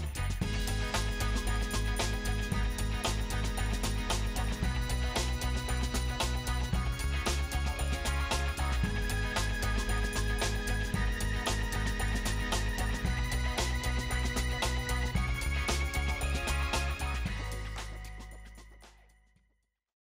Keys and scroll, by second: 0.4 typing, 1.4 Tab, 1.8-2.1 typing, 2.7 Return, 10.2-11.3 ctrl+space, 11.3 space.